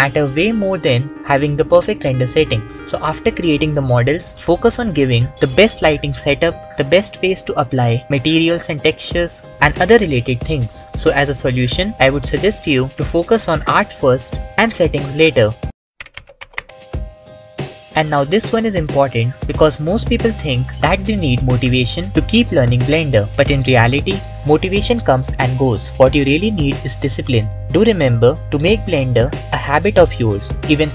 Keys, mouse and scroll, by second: 0.7 click, 1.8 click, 3.8-4.6 typing, 4.8 click, 6.2 click, 6.8 click, 8.2 KP_1, 10.2 click, 12.3 click, 14.7 click.